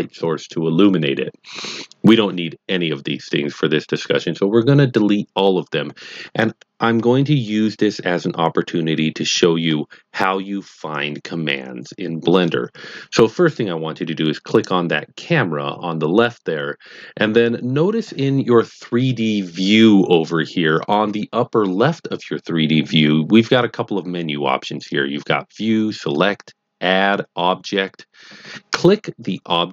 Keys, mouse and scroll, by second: 14.4 click.